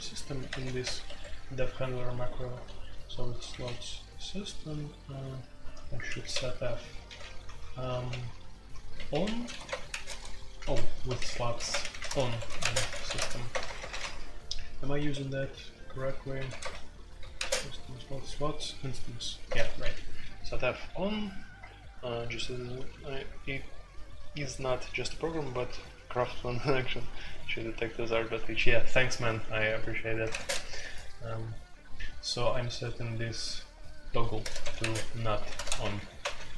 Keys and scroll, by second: 0.0-0.8 typing, 1.0 Escape, 2.5-14.0 typing, 3.7 Escape, 10.6 Escape, 15.0 Escape, 15.2-17.3 typing, 19.4-20.3 typing, 30.2-30.8 typing, 34.4-36.5 typing.